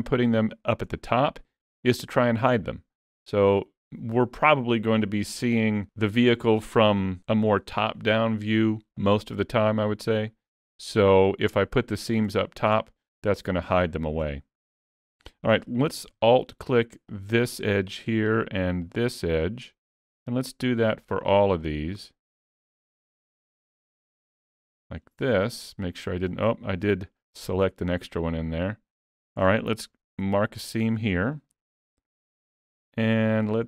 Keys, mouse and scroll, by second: 0.9-2.1 scroll down 4, 2.6 middle click, 10.3-10.7 scroll up 4, 10.7 middle click, 12.5 shift+middle click, 12.8 middle click, 13.8 shift+middle click, 14.4 middle click, 15.3 shift+middle click, 17.1 alt+click, 18.9 alt+shift+click, 25.3 middle click, 27.2 shift+click, 27.7 middle click, 30.3 ctrl+e, 32.3 alt+a, 33.0 middle click.